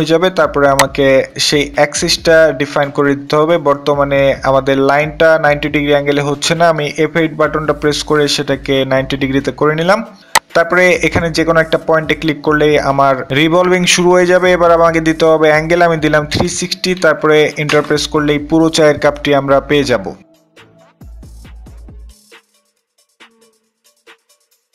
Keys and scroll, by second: 6.7 f, 7.1 F8, 15.5-16.5 typing, 17.1 Return.